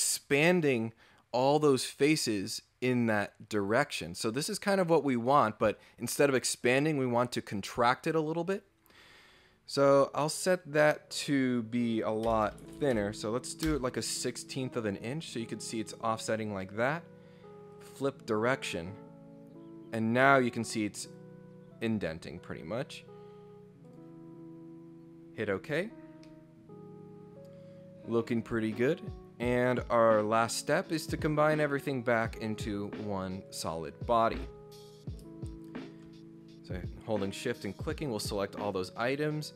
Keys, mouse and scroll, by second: 9.9 click, 13.7 Return, 14.6-15.3 scroll down 3, 15.9 scroll up 2, 16.2-16.5 scroll down 4, 17.7 click, 19.8-20.4 scroll up 6, 20.4 scroll down 4, 21.6-22.0 scroll down 4, 23.8 click, 25.3-26.0 scroll up 6, 26.0 scroll down 2, 26.2-28.2 middle drag, 31.8 click, 33.5 click, 34.3 click, 35.6 shift+click, 37.3 click.